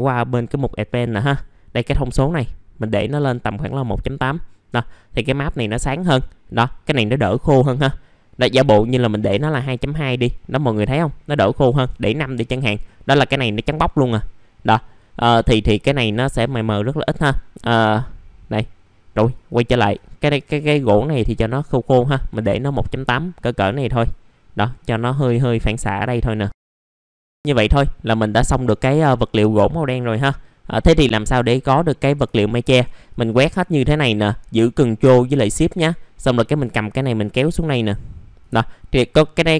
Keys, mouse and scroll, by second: 2.8 KP_1, 2.9 KP_Decimal, 3.2 KP_8, 5.7 middle click, 8.5 click, 8.9 KP_2, 9.0 KP_Decimal, 9.2 KP_2, 13.0 middle click, 19.1 click, 19.6 KP_1, 19.8 KP_Decimal, 20.3 KP_8, 23.9 click, 24.7 middle click, 24.8-27.4 scroll down 1, 27.4 click, 28.3-28.8 scroll down 1, 29.0 middle click, 30.6 click, 33.1 click, 36.4 ctrl+shift+click, 38.4 click, 39.3 click.